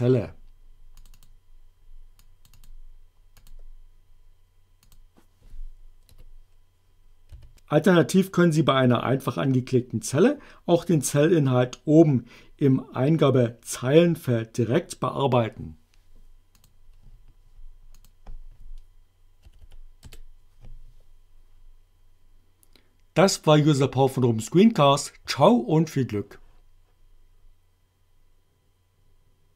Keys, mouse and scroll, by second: 0.9 click, 2.2 click, 3.3 click, 4.9 click, 6.1 a, 7.4 b, 16.6 click, 18.0 click, 19.5 Delete, 20.0 Return.